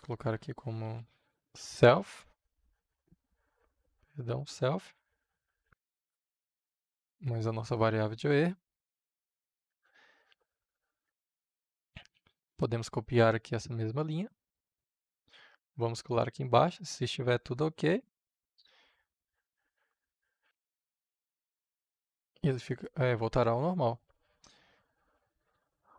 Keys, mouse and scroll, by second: 0.5-1.7 typing, 3.0 >, 3.6 Return, 4.4 f, 4.8 >, 5.5 ctrl+v, 6.9-8.9 drag, 9.9-11.5 drag, 12.1 ctrl+c, 14.3-15.5 drag, 15.5 Return, 16.8 ctrl+v, 18.7-20.6 drag, 21.1 shift+o, 21.4 k, 22.6-23.7 drag.